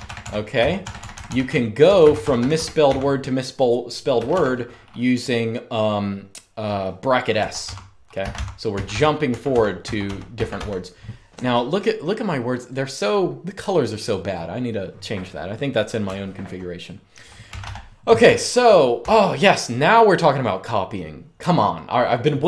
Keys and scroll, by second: 0.0-2.5 typing, 3.8 typing, 7.1-10.7 typing, 15.7-19.1 typing.